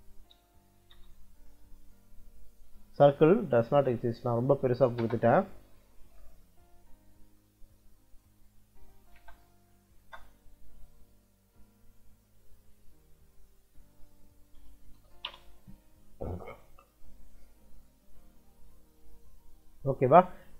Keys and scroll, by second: 0.2 BackSpace, 0.8 Return, 4.6 c, 4.9 space, 8.2 Escape, 8.8 c, 9.1 space, 9.4 t, 9.9 space, 14.5 4, 14.8 ', 15.2 Return.